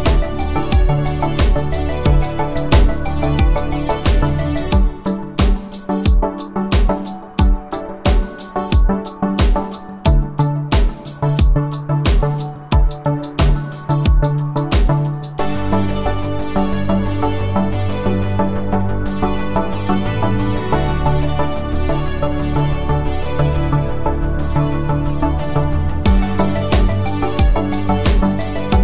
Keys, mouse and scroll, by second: 4.5 space, 10.2 space, 11.5-13.1 click, 15.3 u, 16.7 click, 18.1 F9, 21.8 click, 26.7 click.